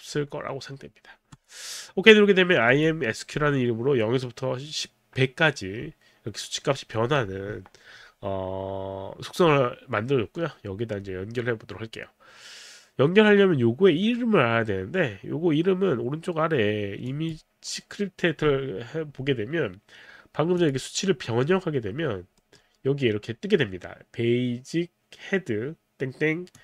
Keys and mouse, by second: 1.4 click, 2.7 click, 3.5 middle click, 17.1 click, 20.6 click, 21.3 middle click, 21.3 click, 22.4 middle click, 26.5 click.